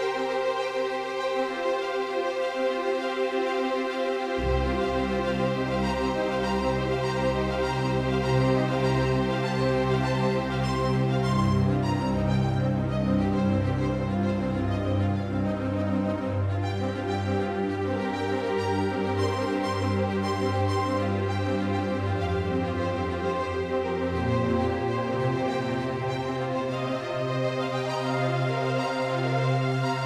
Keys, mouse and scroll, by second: 2.5-5.0 right drag, 4.0-6.1 drag, 6.3-8.7 right drag, 7.8-10.1 drag, 10.1-12.6 right drag, 11.3-15.2 drag, 15.2-18.3 middle drag, 18.3-20.6 drag, 22.6-24.7 drag, 24.2-29.9 right drag.